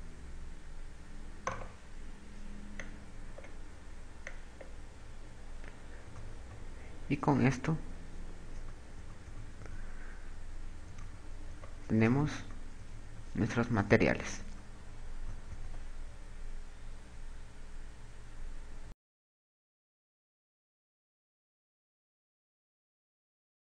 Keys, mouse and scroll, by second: 1.4 right click, 3.5 click, 5.0 click, 5.9 KP_2, 7.0 KP_2, 7.5 KP_6, 9.1 KP_4, 9.5 KP_4, 9.9 KP_4, 10.1 KP_4, 12.4-15.8 typing, 17.6 KP_2.